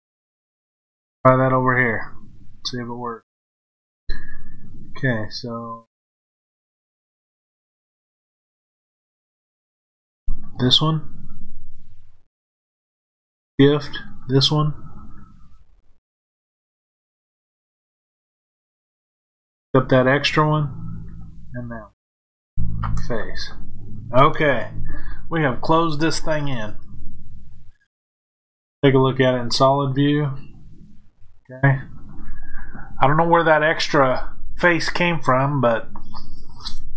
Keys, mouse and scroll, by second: 10.3 click, 14.0 shift+click, 17.5 shift+click, 19.3 shift+click, 21.1 shift+click, 22.6 f, 26.8-30.1 middle drag, 30.1 click.